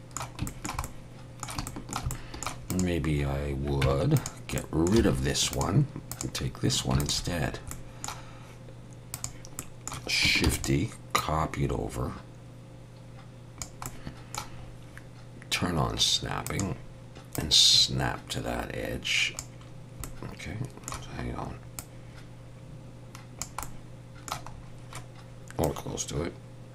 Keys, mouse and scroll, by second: 0.5 shift+middle click, 0.8 middle click, 1.7 shift+middle click, 2.1 middle click, 2.7 click, 3.8 Tab, 4.2 click, 4.6 middle click, 5.0 x, 6.1 click, 7.0 shift+click, 7.5 scroll down 2, 7.7 middle click, 9.2 click, 9.6 middle click, 10.5 shift+d, 11.2 click, 13.9 middle click, 14.6-15.0 scroll up 1, 16.5 click, 16.5 scroll up 1, 17.4 click, 20.1 middle click, 21.8 click, 23.6 middle click, 24.5 scroll up 2, 25.7 click.